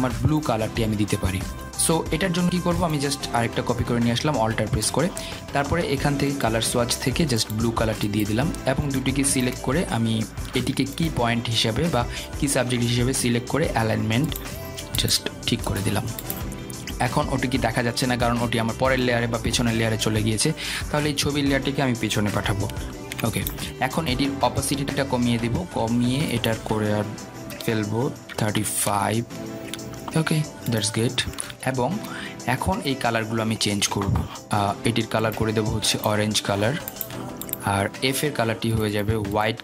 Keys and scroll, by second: 24.1 ctrl+[, 30.2 Return.